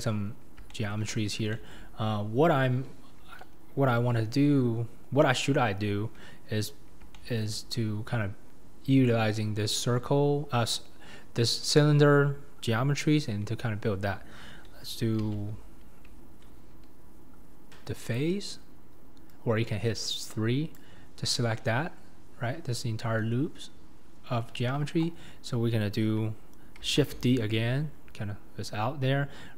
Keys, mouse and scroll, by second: 0.0 click, 0.2-0.7 scroll down 4, 0.7 shift+middle click, 1.1-1.5 scroll down 4, 1.5-2.6 shift+middle drag, 2.6-3.5 scroll up 2, 3.5-4.6 scroll down 1, 6.9 scroll up 1, 7.1 shift+middle click, 7.7-9.7 scroll up 5, 15.2 alt+z, 18.0-20.7 drag, 21.5 scroll down 1, 21.6-24.7 middle drag, 24.7 KP_1, 25.2-27.0 scroll up 2, 27.0 shift+d.